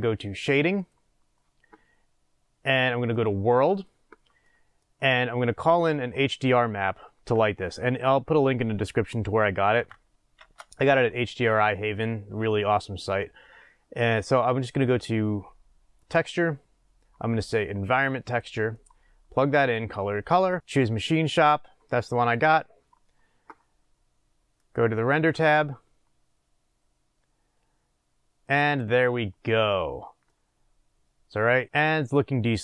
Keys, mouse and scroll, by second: 5.9-20.3 middle drag, 20.6-21.6 drag, 24.5 click, 30.3-32.6 middle drag, 31.5 scroll up 1.